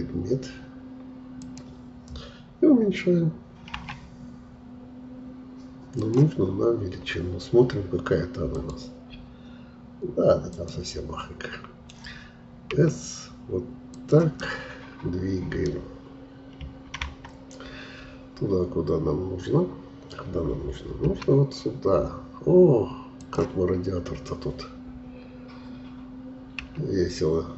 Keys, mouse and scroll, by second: 3.8 s, 6.4-6.9 scroll up 4, 12.7 s, 14.4-16.6 middle drag, 16.6 KP_3, 17.0 KP_1, 21.0 g, 23.7-24.5 scroll up 3, 26.6 s.